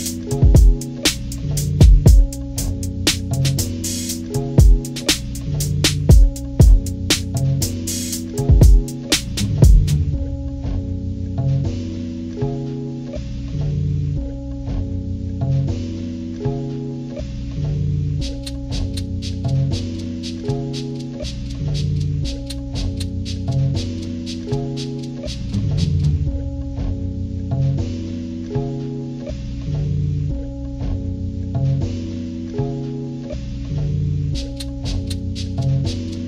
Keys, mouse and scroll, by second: 4.0 ctrl+-, 4.4 ctrl+-, 5.0 ctrl+-, 5.2 ctrl+-, 5.5 scroll down 2, 6.6 ctrl+scroll down 2, 6.9 ctrl+=, 7.1 ctrl+=, 7.4 ctrl+scroll down 2, 8.7-13.3 drag, 14.3-18.3 drag, 19.6 ctrl+-, 19.9 ctrl+-, 20.1 ctrl+-, 20.3 ctrl+-, 20.6 ctrl+-, 21.2 scroll up 2, 21.9 ctrl+=, 23.6 click, 25.2-26.7 drag, 27.6-28.9 drag, 30.9-32.0 drag, 33.4 click, 34.1 scroll down 2, 34.7 scroll down 2, 35.4 scroll up 2, 36.0 click.